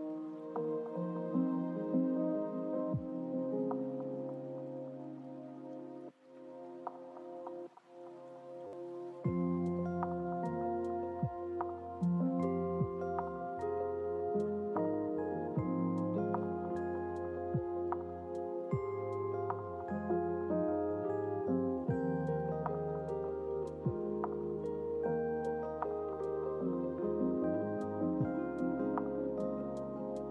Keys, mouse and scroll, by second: 3.8 space, 7.7 KP_0, 9.9-10.5 scroll down 2, 10.5-12.0 scroll up 8, 12.0-14.0 scroll down 12, 16.0-27.0 drag, 28.7 click.